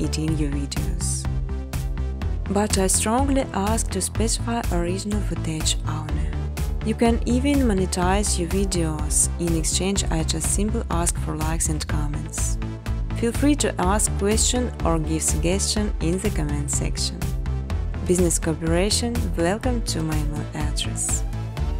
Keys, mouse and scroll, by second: 0.4 click, 1.6-2.6 typing, 2.8 Tab, 4.2-6.5 typing, 6.7 Tab, 11.2-13.6 typing, 12.2 Tab, 16.7-17.4 typing, 18.0 Return, 19.7-21.7 typing, 20.2 alt+click.